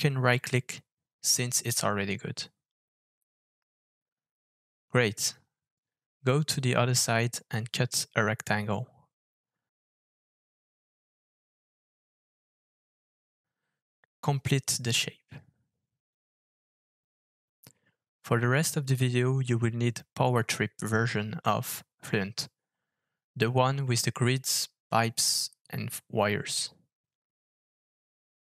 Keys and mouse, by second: 3.9-4.3 middle drag, 5.2-8.3 middle drag, 8.6 shift+middle click, 10.1 alt+f, 13.1-22.7 middle drag, 24.5 alt+f.